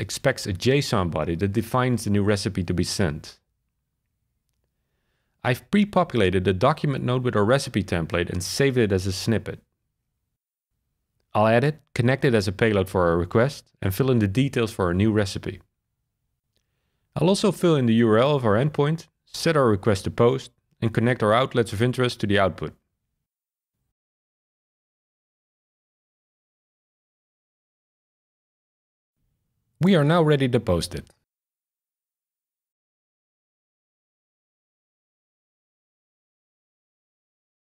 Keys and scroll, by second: 0.3-1.5 typing, 1.5 Down, 1.7 Down, 2.1 Return, 8.4-15.2 typing, 18.3 super+c, 18.8 super+v, 32.9 shift+super+r.